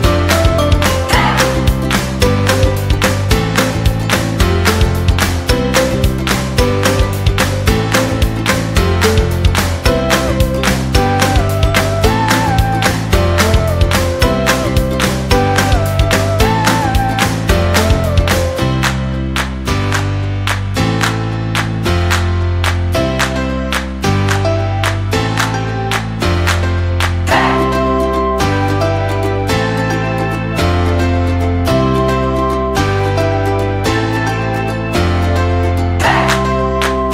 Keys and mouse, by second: 0.2 alt+right click, 0.5 middle click, 1.1 g, 2.8-3.9 middle drag, 4.2-5.4 middle drag, 6.1 alt+right click, 6.5 g, 7.8-9.2 middle drag, 9.2 alt+right click, 9.6 middle click, 10.1 g, 12.0 Tab, 12.4-12.9 middle drag, 13.0-19.2 middle drag, 20.2 middle click, 20.6 KP_3, 20.9 shift+middle click, 21.4 Tab, 23.5 shift+right click, 24.4 shift+right click, 24.7 g, 26.2 middle click, 26.8 right click, 27.4 shift+right click, 27.6 shift+right click, 27.8 KP_3, 28.3 g, 30.1 Tab, 30.8-31.9 middle drag, 31.9 KP_1, 32.3 shift+middle click, 32.9 Tab, 34.5 alt+z, 35.1 b, 36.2 s.